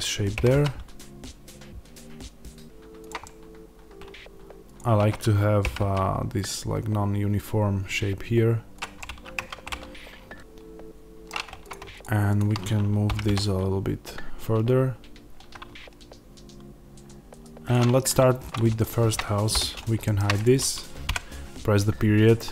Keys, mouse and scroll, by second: 0.3 g, 2.9 click, 3.1-4.6 middle drag, 3.9 1, 4.6 click, 5.6 g, 8.7 click, 8.9-11.6 middle drag, 9.3 Tab, 11.6 click, 13.0 g, 17.6 click, 19.4 h, 19.9 shift+middle click, 20.2 click, 21.0 KP_Decimal, 22.4-22.5 middle drag.